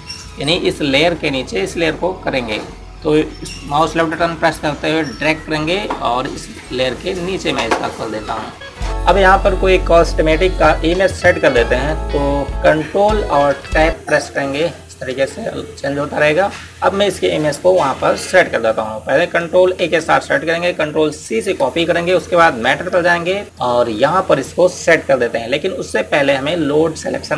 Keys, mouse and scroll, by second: 5.8 click, 8.9 Tab, 14.4 ctrl+Tab, 15.2 Tab, 20.7 a, 21.9-22.6 typing, 23.4 Tab.